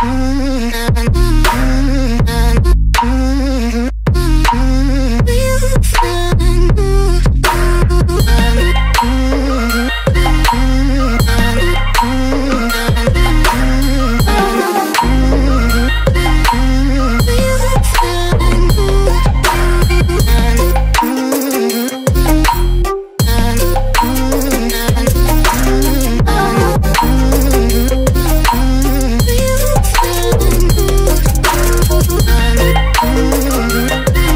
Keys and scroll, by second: 6.1 Delete, 16.3 ctrl+j, 23.6 ctrl+i.